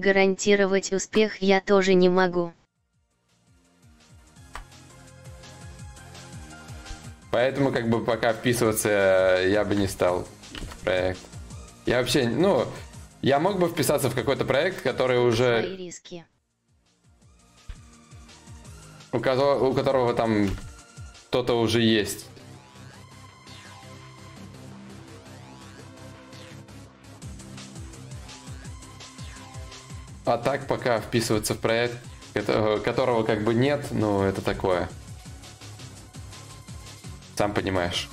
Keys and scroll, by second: 0.6 ctrl+z, 4.0 ctrl+z, 15.6 ctrl+z.